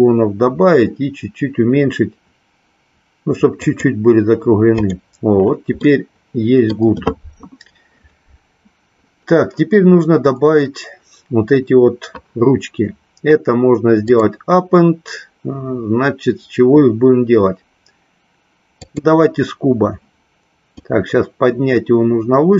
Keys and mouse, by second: 3.6 click, 4.8 click, 5.8-6.8 middle drag, 14.0-19.0 drag, 20.8-22.5 drag.